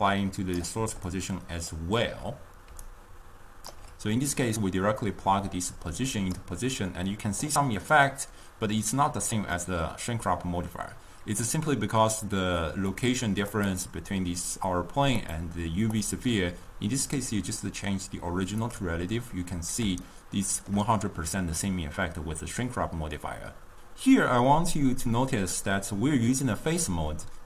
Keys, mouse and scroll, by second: 1.1 d, 1.4 click, 1.8 d, 2.4 d, 3.0-4.0 right drag, 4.0 d, 4.5 drag, 13.0 click, 13.8 click, 15.5 click, 16.2 click, 18.8 click, 20.1-23.5 shift+middle drag.